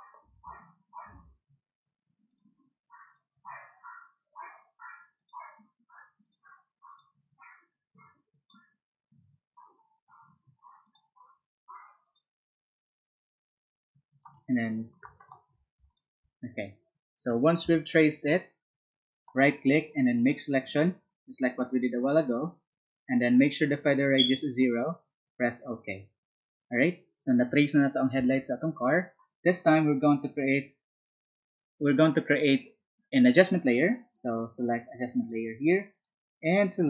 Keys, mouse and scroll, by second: 0.4 ctrl+z, 1.5 ctrl+z, 2.2 click, 3.0 click, 5.1 click, 6.2 click, 8.2 click, 10.8 click, 12.0 click, 14.2 right click, 15.1 ctrl+click, 15.8 ctrl+click, 19.2 ctrl+right click, 20.2 ctrl+click, 20.6 ctrl+click, 24.6 ctrl+click, 35.2 ctrl+click, 35.9 ctrl+click.